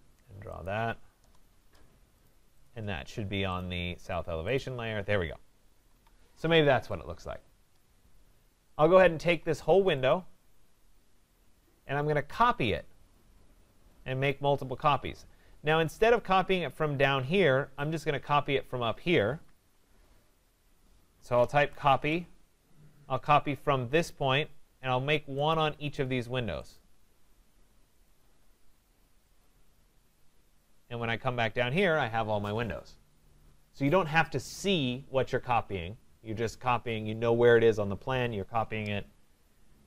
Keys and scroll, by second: 5.7 Escape, 21.9 Return, 39.7 Escape.